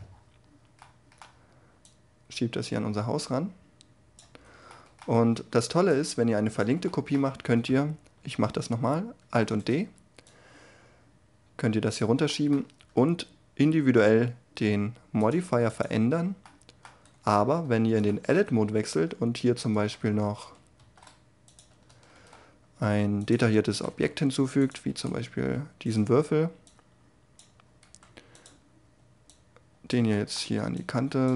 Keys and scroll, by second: 8.7 alt+d, 17.0 Tab, 20.7 shift+s, 23.8 s, 24.8 g, 27.8 s.